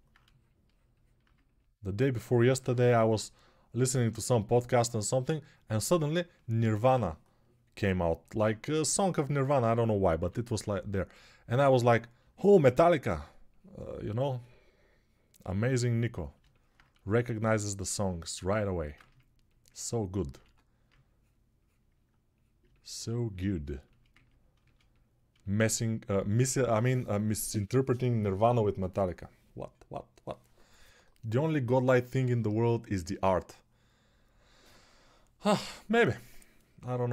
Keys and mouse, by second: 10.0 3.